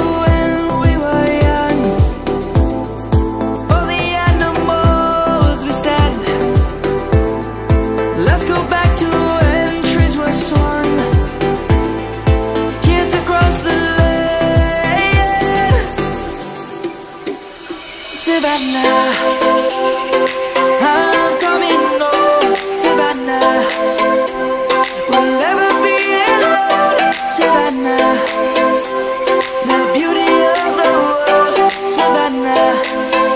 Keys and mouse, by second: 4.6 right click, 9.2 Tab, 9.9 shift+click, 12.1 click, 16.0 click, 23.2 ctrl+z, 25.1 shift+middle click, 26.2 middle click, 27.8 1, 29.4 Tab, 30.5 click, 31.2 Tab, 31.7 click, 32.4 Tab.